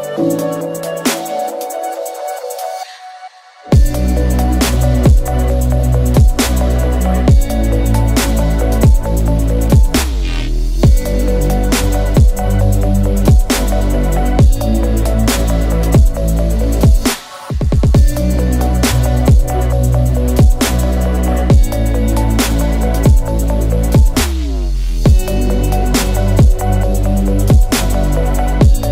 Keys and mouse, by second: 0.5 g, 1.8 shift+click, 2.2 ctrl+r, 4.6 ctrl+b, 9.1 shift+click, 9.4 z, 10.2 click, 10.9-12.2 typing, 12.6 click, 13.5-17.8 drag, 18.1 shift+drag, 18.6 drag, 19.5 click, 20.3-21.3 drag, 22.3 click, 22.8 3, 23.7 shift+click, 24.5 e, 26.2 s.